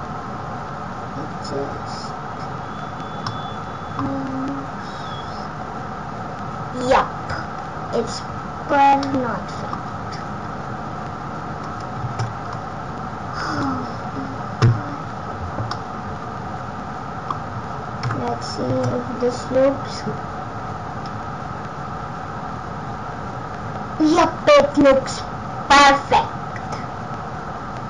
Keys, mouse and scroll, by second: 3.2 middle click, 9.0 middle click, 12.0 space, 12.6 click, 15.6 middle click, 17.9 KP_0, 18.6 space.